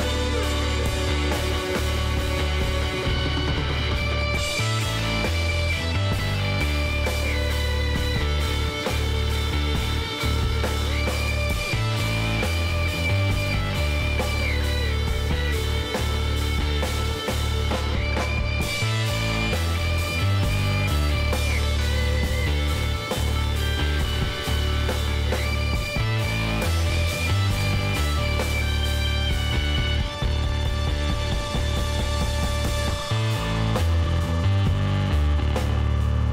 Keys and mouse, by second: 3.4-4.8 drag, 4.8-6.0 middle drag, 6.0 Tab, 9.8 alt+h, 10.9 Tab, 12.0 middle click, 13.6 Tab, 15.3 p, 16.1 Tab, 16.3 click, 17.0-18.1 middle drag, 19.0 KP_3, 21.5 s, 24.9-27.3 middle drag, 27.3 Tab, 27.7-30.3 middle drag, 28.4 Tab, 29.5 a, 30.8 middle click, 31.0 KP_1, 32.2 KP_3, 32.6 z, 33.0 middle click, 35.9 z.